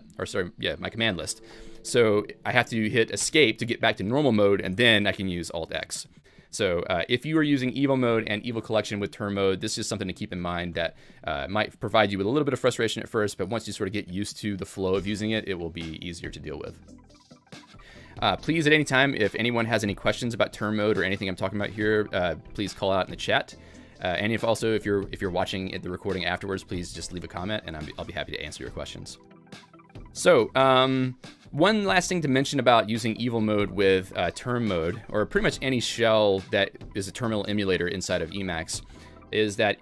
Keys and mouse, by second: 3.2 Escape, 4.7 alt+x, 7.5 ctrl+g, 31.7-32.4 typing, 38.7 i.